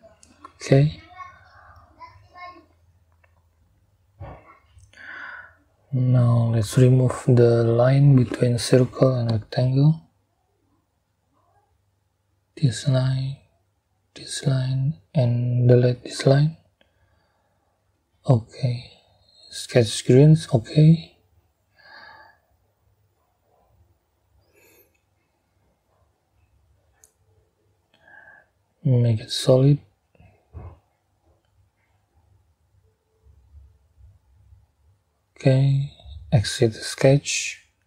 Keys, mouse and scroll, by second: 0.7 click, 3.6-4.0 scroll up 2, 7.5 click, 9.7 click, 12.4 click, 14.0 click, 15.5 click, 16.5 click, 17.9 Delete, 18.6-19.4 scroll down 4, 19.5 scroll up 2, 20.3 scroll down 2, 20.8 scroll up 2, 22.7 click, 24.1 click, 33.3 click, 34.4 click, 37.5 click.